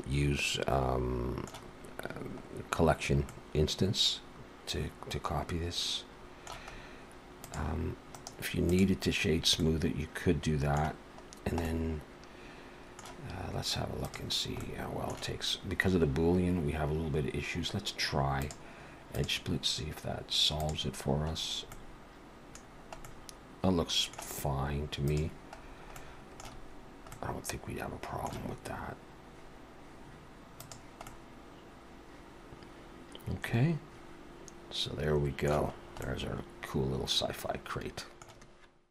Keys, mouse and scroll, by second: 3.3 middle click, 6.8-7.4 scroll up 1, 7.4 click, 8.1 right click, 9.3-9.8 scroll up 2, 9.6 middle click, 11.3 scroll down 1, 11.6 middle click, 14.1 click, 14.6 middle click, 18.4 click, 19.2 click, 21.4-21.7 scroll up 1, 21.7 middle click, 22.7 scroll down 1, 23.0 middle click, 25.1 click, 25.6-26.0 scroll down 3, 26.0 middle click, 27.1 middle click, 30.6 click, 31.1 middle click, 35.8 scroll up 2, 36.0 middle click.